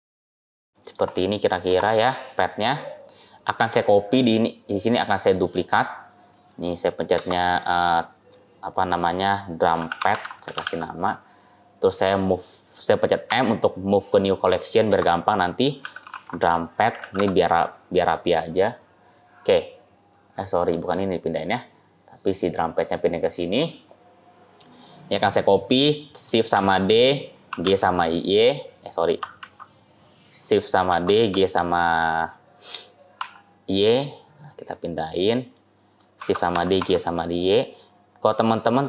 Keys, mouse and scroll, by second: 0.4 middle click, 0.5 scroll down 4, 0.6 middle click, 0.9 click, 1.2 middle click, 1.6 click, 2.4 click, 3.2 click, 6.2 click, 6.3 click, 12.1 click, 13.2 m, 20.1 click, 22.2 click, 26.4 shift+d, 29.2 ctrl+z, 30.7 shift+d, 36.0 shift+d.